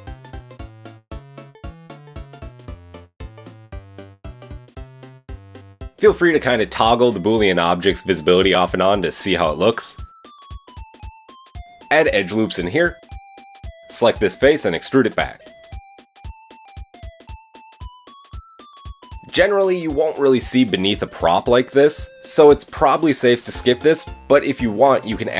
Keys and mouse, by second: 0.0 KP_3, 1.5 g, 2.0 ctrl+KP_3, 2.0 ctrl+KP_1, 3.3 g, 5.0-6.4 middle drag, 7.9 Tab, 8.6 click, 10.0 Tab, 10.6 KP_7, 11.7 ctrl+r, 13.6 shift+click, 14.6 click, 15.5 ctrl+KP_7, 17.3 e, 17.3-18.3 drag, 17.5 g, 18.3 middle click, 18.7 Tab, 19.1 click, 22.7-25.3 middle drag.